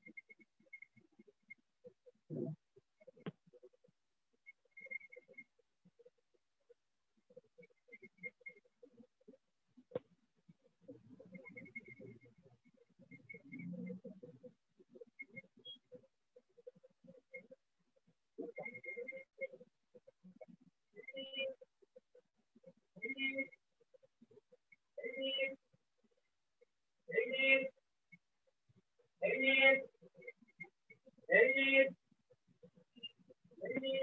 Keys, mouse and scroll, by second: 2.1 click, 4.1 click, 5.1 click, 6.1 click, 7.1 click, 11.1 click, 12.1 click, 13.1 click, 14.1 click, 15.1 click, 16.1 click, 17.1 click, 18.1 shift+click, 19.1 click, 20.1 click, 21.1 shift+click, 23.1 click, 24.1 click, 25.2 click, 27.1 click, 28.1 click, 29.1 shift+click, 30.2 click, 32.1 shift+click, 33.1 click.